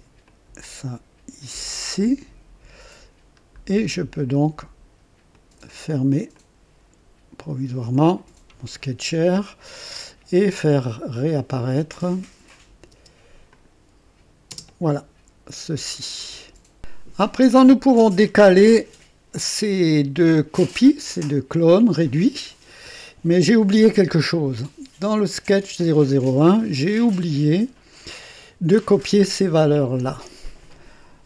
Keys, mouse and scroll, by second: 0.2-2.1 drag, 2.9 scroll down 1, 5.3 click, 6.4-7.8 drag, 12.0 click, 12.9 space, 13.5 click, 14.5 typing, 16.8 click, 17.4-19.1 drag, 25.3 click, 26.8 scroll up 1.